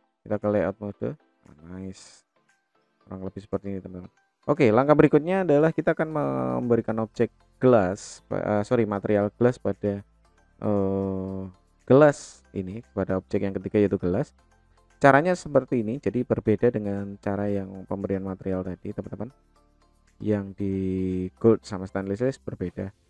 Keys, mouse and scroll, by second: 0.7 click, 1.1-3.5 middle drag, 4.0-4.3 middle drag, 5.2-5.7 shift+middle drag, 6.0-6.4 middle drag, 7.2 click, 8.5 click, 11.7-12.4 middle drag, 14.8 click, 16.1 click.